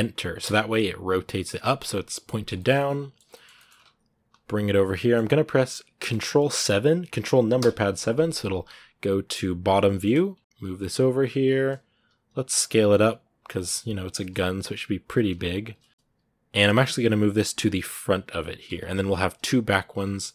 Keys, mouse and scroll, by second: 1.4-3.5 middle drag, 3.5-3.9 scroll up 2, 3.9 g, 4.8-7.4 middle drag, 7.4 ctrl+KP_7, 8.3-9.5 scroll up 1, 9.5 shift+middle click, 9.9 scroll up 1, 10.2 g, 15.6 scroll down 1, 15.9 g, 19.8-20.3 scroll down 1.